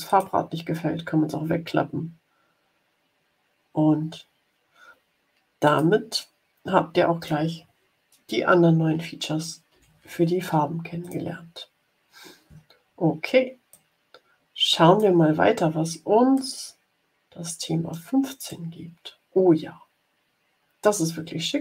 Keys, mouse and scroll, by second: 0.0 click, 5.5 click, 9.6 Delete, 10.9 click, 13.7-15.1 drag, 16.3 click, 16.8 middle click, 17.4 click, 18.4-21.6 drag.